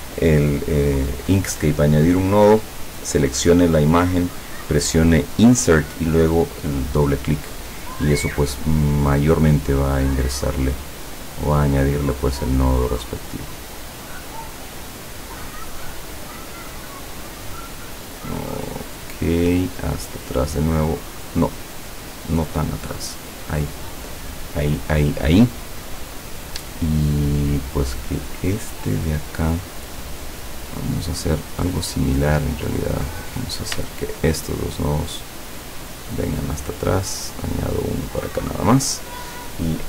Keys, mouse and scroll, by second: 9.7 click, 11.3 click, 12.7-15.2 drag, 15.9-17.3 drag, 18.9 click, 19.9 click, 21.7 click, 22.4 click, 22.9 click, 29.8 click, 30.7 click, 32.2 click, 33.2 click, 34.1 shift+click, 34.6-36.5 shift+drag, 36.9 click, 37.6-38.8 drag.